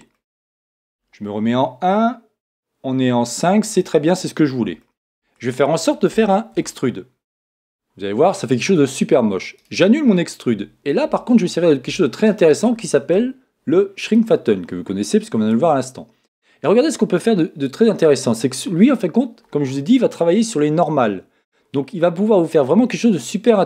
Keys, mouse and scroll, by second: 0.1-1.5 middle drag, 1.4 KP_1, 1.7 middle click, 3.8-4.7 scroll down 1, 4.8-6.9 middle drag, 6.5 e, 9.7-11.4 right drag, 14.2-15.9 drag.